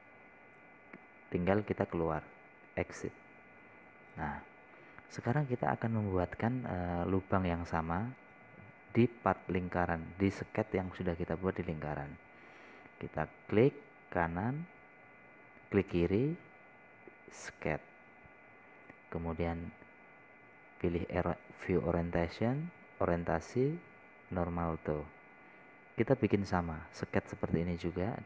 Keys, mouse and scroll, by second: 1.0 click, 5.6 scroll up 1, 6.9 middle click, 7.7 scroll down 1, 15.0 click, 26.8 scroll down 1.